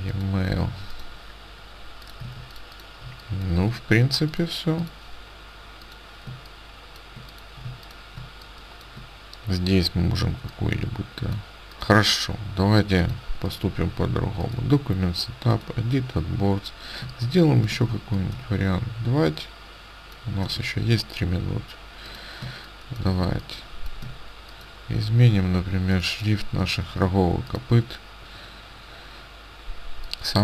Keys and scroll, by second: 2.3 ctrl+space, 6.3 space, 7.6 space, 17.1 space, 22.5 space, 26.9 ctrl+a.